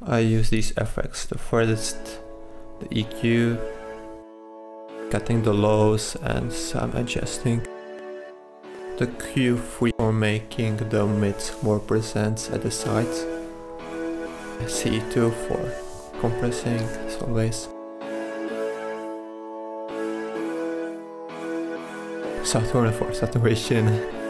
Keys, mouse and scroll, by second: 5.1 click, 6.6-7.2 drag, 23.7 Escape.